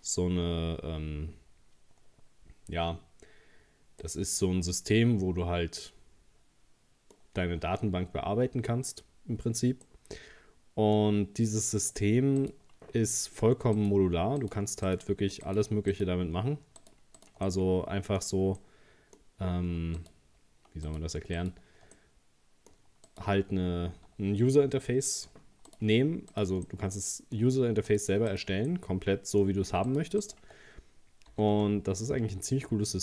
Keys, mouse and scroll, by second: 4.0-7.2 middle drag, 7.4-7.7 scroll up 1, 9.8-12.4 middle drag, 12.4 right click, 13.8 shift+right click, 14.4 right click, 14.9 shift+right click, 15.4 shift+right click, 15.9 shift+right click, 16.8 shift+right click, 17.2 shift+right click, 17.5 middle click, 18.2-18.6 scroll up 2, 18.6-20.0 middle drag, 20.0 shift+right click, 20.9 shift+right click, 21.4 shift+right click, 22.0-23.1 middle drag, 23.1 shift+right click, 25.7 shift+right click, 26.3 shift+right click, 26.7-27.9 middle drag, 27.9 shift+right click, 28.3 shift+right click, 28.7-29.9 middle drag, 29.9 shift+right click, 30.2 shift+right click, 31.3 g.